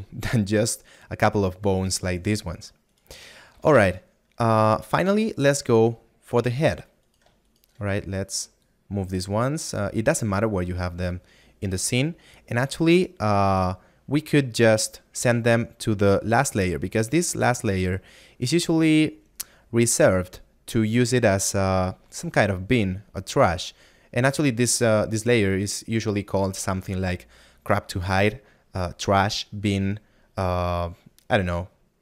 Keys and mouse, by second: 4.3 middle click, 8.9 click, 11.5 click.